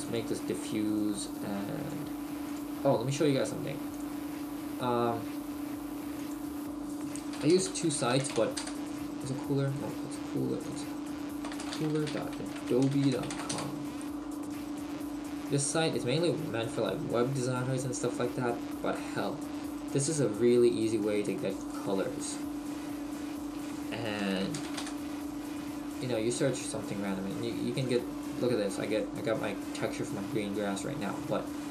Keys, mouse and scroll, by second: 2.5 click.